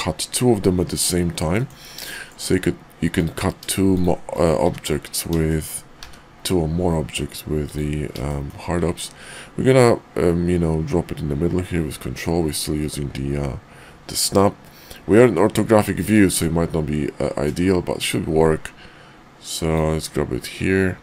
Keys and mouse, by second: 0.5 middle click, 1.6 middle drag, 2.1 shift+middle drag, 3.0 click, 3.8 shift+click, 5.4-5.7 shift+drag, 6.0 d, 8.2 shift+middle drag, 16.1-21.0 ctrl+drag.